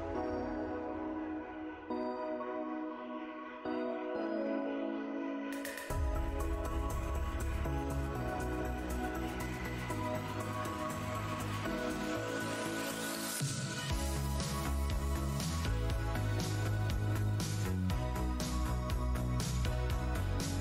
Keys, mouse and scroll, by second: 0.7 alt+Tab, 0.8-1.4 alt+scroll down 2, 1.9 shift+x, 5.4 click, 5.8 shift+Tab, 7.9-8.5 scroll down 1, 8.8 Delete, 9.4 Delete, 9.6 shift+Tab, 9.9 shift+click, 10.0 shift+Tab, 10.1 Delete, 10.1 space, 10.7 click, 11.2 Tab, 12.8 x, 13.4 Tab, 16.0 shift+v, 16.7 scroll down 2, 17.2 space, 17.4-18.0 scroll down 2, 18.7 alt+Tab, 18.8 alt+click, 19.1 alt+scroll down 1, 19.1 shift+d, 19.2 shift+Tab, 19.7 scroll down 1, 20.4 alt+scroll down 1, 20.4 shift+d, 20.5 shift+Tab.